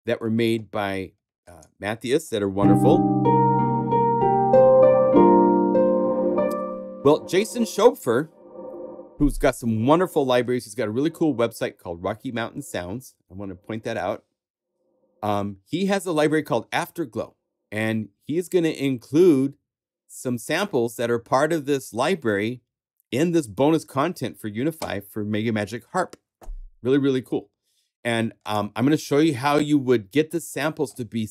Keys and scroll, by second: 11.0 super+Tab.